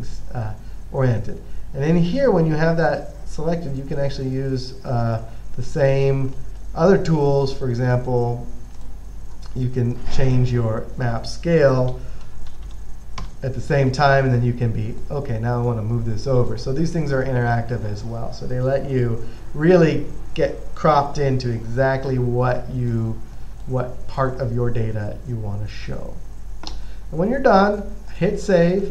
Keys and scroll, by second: 12.0-13.4 typing, 13.5 Return, 17.7 typing.